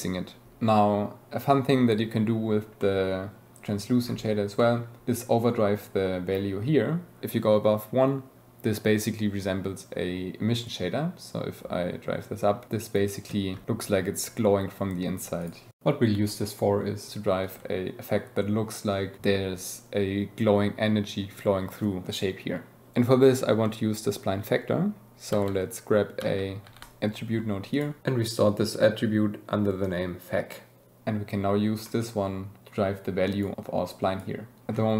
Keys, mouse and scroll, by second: 0.2 click, 2.8 click, 4.5 click, 15.4 click, 17.4-19.2 shift+drag, 26.8 t, 27.7 click, 28.5-30.0 drag, 31.8 click, 32.3-33.4 drag, 33.5 click.